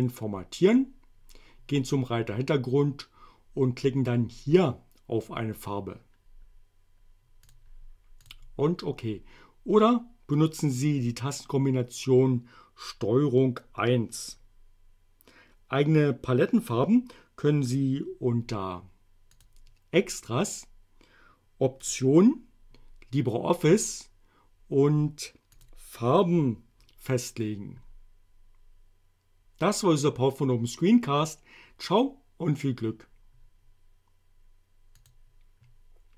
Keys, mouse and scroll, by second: 7.5 click, 8.3 click, 19.4 click, 21.8 click, 25.6 click, 35.0 click.